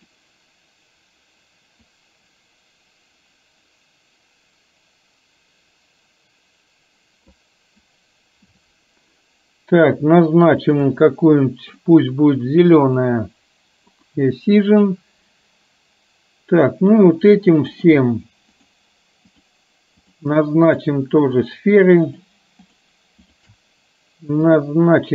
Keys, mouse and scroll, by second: 1.9-11.0 drag, 11.9-13.2 drag, 17.9 click, 18.6-19.0 shift+drag, 19.4 shift+click, 20.0-20.4 shift+drag, 20.7 shift+click, 21.4 shift+click, 22.1 shift+click, 22.6 shift+click, 24.6-25.1 drag.